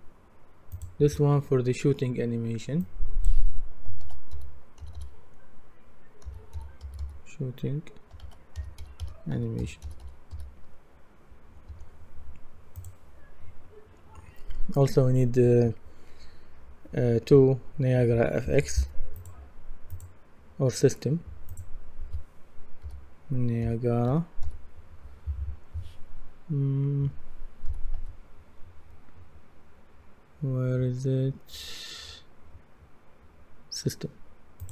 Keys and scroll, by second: 3.8-5.4 typing, 6.6-10.8 typing, 11.7 Return, 22.8-24.9 typing, 27.0-28.0 typing.